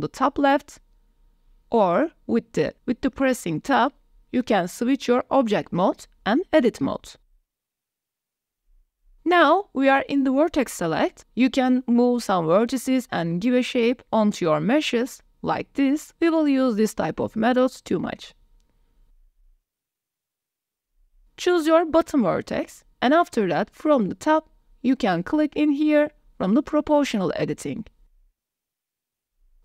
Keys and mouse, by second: 6.8 click, 9.0 click, 11.2 click, 11.8 click, 12.6 Tab, 13.0 shift+click, 13.6 middle click, 14.1 shift+middle click, 15.6 click, 16.6 g, 19.6 middle click, 20.7 click, 22.0 middle click, 25.7 middle click, 26.6 middle click, 28.9 g.